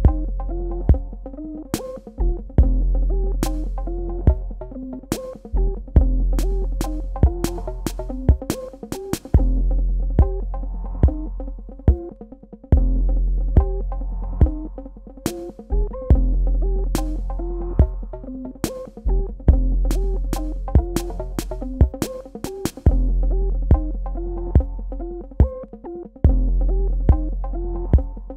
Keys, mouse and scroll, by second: 5.2 click, 9.0 ctrl+click, 9.2 ctrl+space, 12.0 ctrl+click, 12.5 ctrl+space, 13.8 ctrl+click, 14.4 ctrl+alt+click, 16.0 ctrl+click, 19.4 space, 19.7 click, 20.0 space, 20.3 click, 20.5 space, 20.7 click, 21.2 space, 22.6 click, 24.2 super+KP_Add.